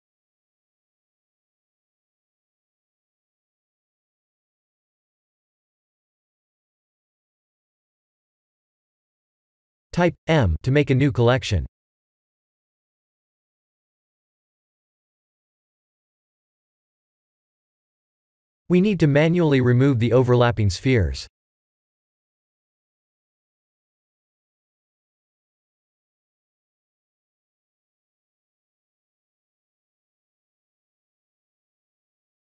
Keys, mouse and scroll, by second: 2.2 click, 5.2 click, 10.7 m, 14.8 click, 15.6 click, 19.2 click, 22.0 shift+click, 23.2 shift+click, 25.3-26.6 middle drag, 31.7 KP_1.